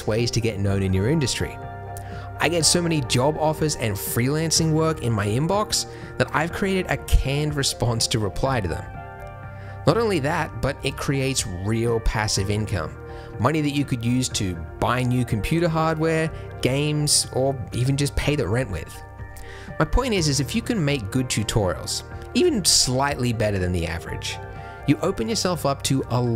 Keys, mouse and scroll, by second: 19.1 a, 20.0 t, 23.0 middle click.